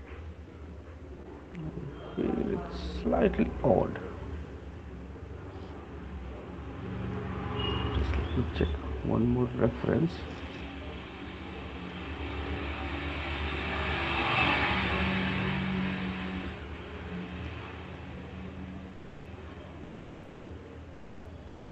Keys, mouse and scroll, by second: 0.1 ctrl+z, 0.7 ctrl+z, 1.5 ctrl+z, 2.8 ctrl+z, 7.7 click, 8.7 Right, 13.2 shift+click.